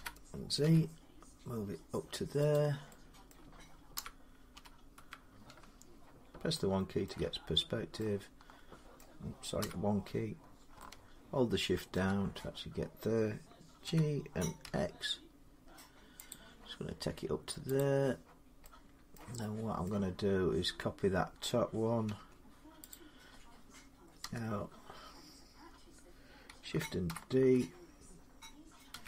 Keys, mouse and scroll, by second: 0.4 z, 0.8-3.1 drag, 3.1 middle click, 3.7-4.8 typing, 6.9-9.8 shift+middle click, 7.1 1, 7.3 scroll, 8.8 middle click, 9.4 1, 11.7 shift+middle click, 11.9-12.3 scroll, 13.6-15.3 typing, 16.1 click, 17.6 click, 19.0 middle click, 19.7 middle click, 22.0 Tab, 22.7 click, 24.0 l, 26.9 shift+d, 28.7-29.0 typing.